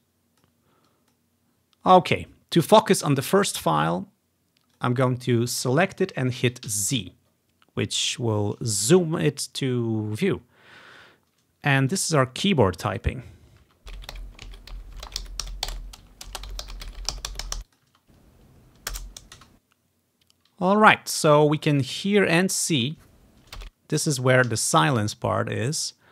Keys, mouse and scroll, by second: 4.8-6.8 drag, 6.8 z, 12.0 click, 12.5 click, 13.1 click, 13.7 space, 17.5 space, 17.8-18.8 drag, 18.0 space, 19.5 space, 21.7 click, 22.0 ctrl+scroll up 1, 22.7 click, 22.8 space, 23.3-25.6 drag, 23.6 space, 24.6 s.